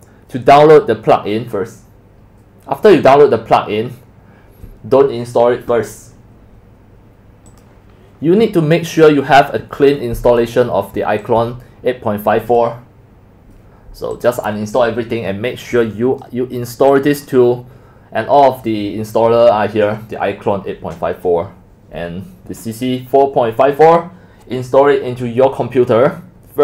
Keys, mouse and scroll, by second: 7.6 scroll down 4, 7.6-8.2 drag, 8.2-8.8 scroll down 1, 8.4-12.5 middle drag, 12.1-12.5 scroll down 2, 12.5-19.5 drag, 21.2-22.5 drag.